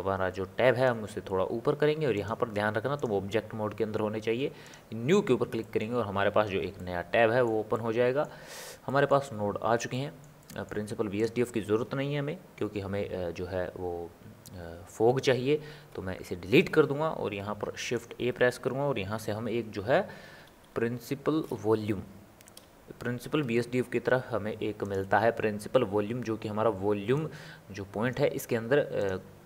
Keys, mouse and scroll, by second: 0.0-5.6 drag, 5.6-11.2 middle drag, 11.2 click, 16.1 Delete, 17.5 shift+a, 27.4 click.